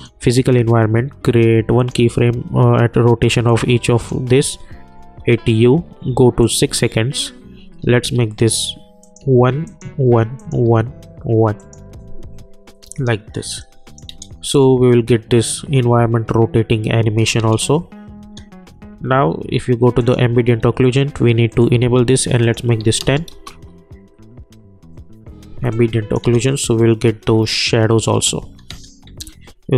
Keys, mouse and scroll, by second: 5.0 u, 6.4 click, 6.6 k, 9.0 click, 12.8 u, 13.6 click, 14.1 space, 16.9 space, 20.0 click, 23.3 Return, 25.7 click, 26.2 space, 28.3 space.